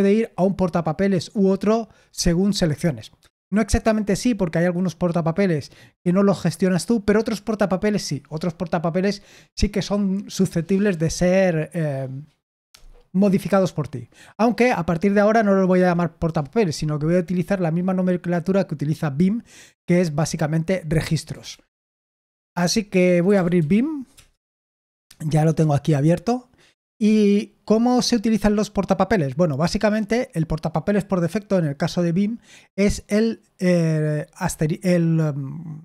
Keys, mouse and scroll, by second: 21.4 super+l, 22.2 super+l, 22.9-24.0 typing, 24.1 Return.